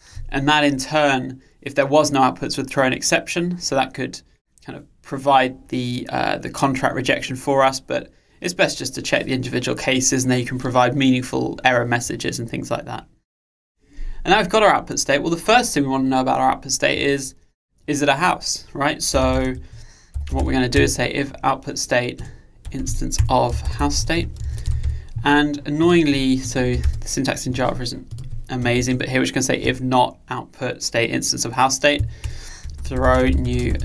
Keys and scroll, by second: 20.8 Return.